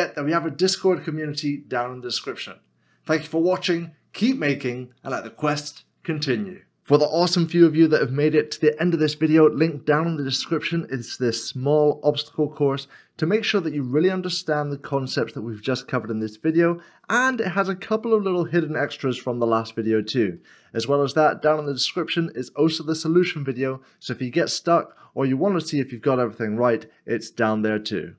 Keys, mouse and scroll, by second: 6.8 middle click, 13.4 middle click, 20.4 middle click.